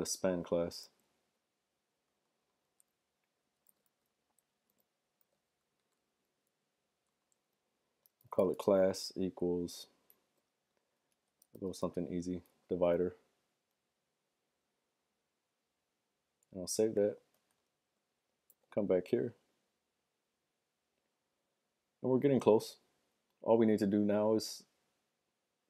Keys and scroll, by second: 2.5 typing, 3.6-9.0 typing, 10.5 Left, 10.8-12.4 typing, 17.2 super+s, 17.4 super+Tab, 18.9 super+r.